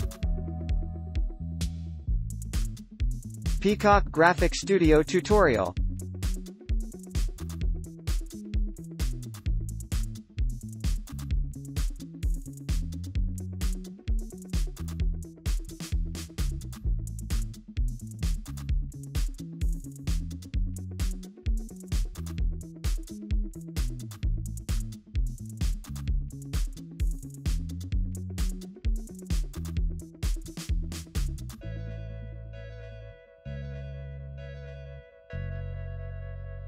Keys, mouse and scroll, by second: 0.8 scroll up 1, 1.0-1.4 scroll down 1, 1.6 ctrl+j, 2.4 scroll up 1, 11.1-11.7 scroll up 1, 17.0-18.2 scroll down 1, 18.2 space, 25.3 right click, 29.0 alt+click, 29.6 alt+right click, 31.8 alt+click, 32.8 alt+click.